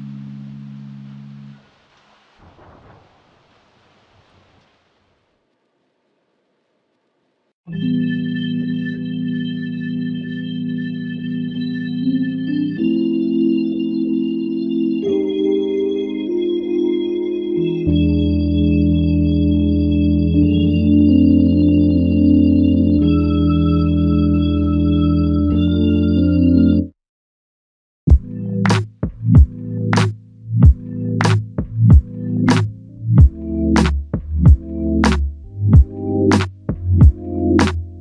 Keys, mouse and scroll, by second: 0.1 alt+click, 1.4 double click, 4.5 alt+click, 6.5 double click, 9.2 alt+click, 13.0 alt+click, 18.4 alt+click, 22.8 typing, 24.2 alt+click, 25.8 ctrl+alt+click, 27.3 ctrl+click, 32.6 ctrl+click, 34.6 shift+click, 35.9 shift+click.